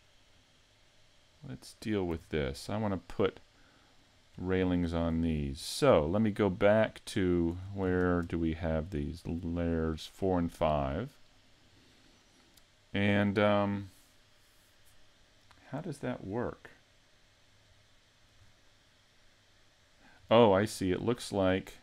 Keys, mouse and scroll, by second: 0.3 click, 2.2 a, 2.5 middle click, 3.8 click, 4.3-4.8 scroll up 3, 4.8 shift+middle click, 7.4 click, 9.2 shift+click, 9.7-10.2 scroll down 4, 10.2 middle click, 12.5 middle click, 16.3-17.8 scroll up 2, 16.7 middle click, 17.8 middle click, 20.6 scroll up 3, 21.2 shift+middle click, 21.7-21.8 scroll up 2.